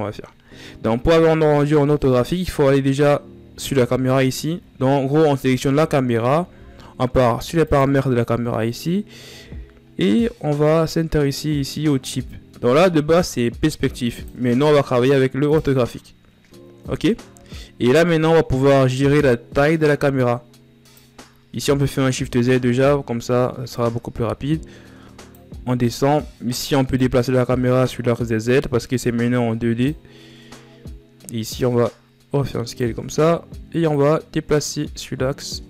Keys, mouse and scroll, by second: 7.5 click, 9.7 scroll down 6, 10.8 scroll up 6, 14.0-17.2 drag, 17.2 scroll down 4, 19.2-21.3 drag, 21.3 shift+z, 21.7 shift+scroll down 5, 23.4-35.6 drag.